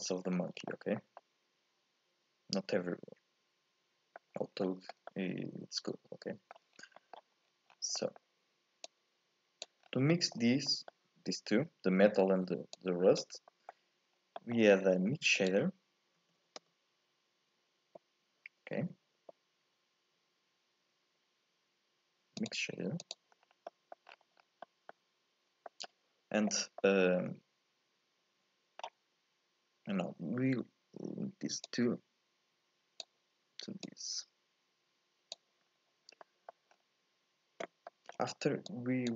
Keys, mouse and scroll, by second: 0.5 scroll down 1, 0.7 shift+middle click, 1.0 scroll up 2, 1.2-4.2 middle drag, 4.4 scroll down 1, 4.6-6.8 shift+middle drag, 6.8 scroll down 1, 7.0 middle click, 7.4 scroll up 1, 7.5-8.0 scroll down 3, 8.0 middle click, 8.9 click, 9.8 scroll up 5, 10.1 middle click, 10.6 scroll up 1, 10.7 middle click, 11.7-12.8 scroll up 1, 12.8 click, 13.5 middle click, 14.2 scroll down 1, 14.4 middle click, 14.7-15.1 scroll up 1, 15.1 shift+a, 23.3-23.7 scroll up 2, 23.7 middle click, 24.1-24.6 scroll down 7, 24.6 scroll up 1, 24.7 middle click, 25.5 scroll down 1, 25.7-29.8 middle drag, 31.7 click, 33.9 click, 35.7-36.2 scroll up 4, 36.2 middle click, 36.7-37.9 scroll up 2, 37.9 middle click, 38.7 click.